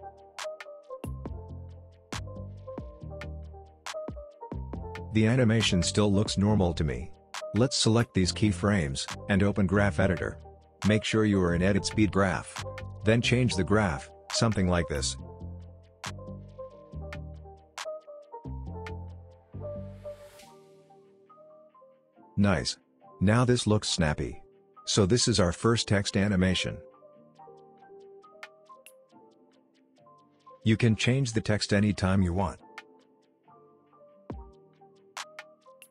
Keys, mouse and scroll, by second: 1.3 click, 3.4 space, 5.7 space, 6.1-8.1 drag, 10.5 right click, 12.8-13.9 drag, 15.3-15.6 click, 17.8 space, 19.6 click, 21.5 space, 23.6 space, 25.0 click, 28.9 click, 30.3-32.6 typing, 33.4 click, 34.7 space.